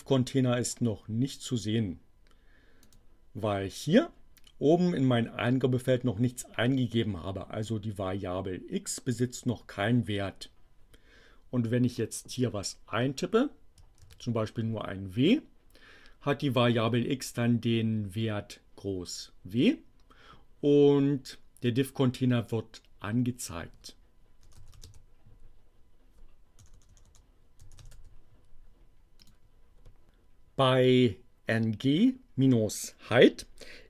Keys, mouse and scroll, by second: 2.8 click, 13.9 shift+w, 24.2-25.3 typing, 26.6-28.4 typing, 29.3 click.